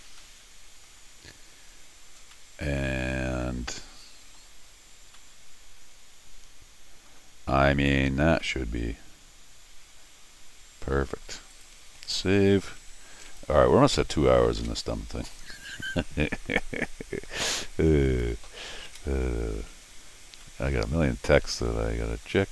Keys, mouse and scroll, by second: 0.0 scroll down 1, 0.2 middle click, 1.3 scroll up 1, 2.3-4.3 middle drag, 5.2-7.1 middle drag, 7.4 scroll down 1, 7.5 middle click, 8.4-11.2 middle drag, 11.5 click, 11.8 s, 13.2-17.6 drag, 14.4 ctrl+alt+shift+r, 15.6 scroll down 2, 16.4 scroll down 2, 16.6 middle click, 18.1 click, 18.9 ctrl+alt+r, 19.8 scroll up 2, 20.3 scroll up 2, 20.4 middle click, 21.7 middle click.